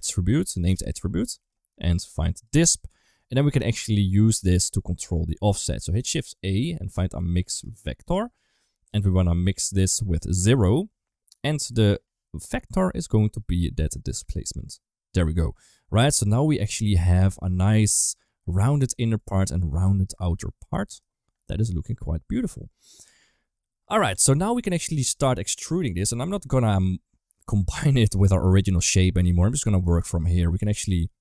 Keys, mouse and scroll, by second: 1.7 click, 3.1 click, 3.8 middle click, 5.8 shift+a, 11.9 click, 12.6 middle click, 13.9 drag, 14.1-14.6 drag, 15.9-18.1 middle drag, 19.0-20.9 middle drag, 21.2-23.9 middle drag, 24.0 Tab, 24.2 middle click, 24.8 2, 24.8 click, 25.0 click, 26.0 shift+middle click, 28.5 KP_1, 29.7 shift+middle click.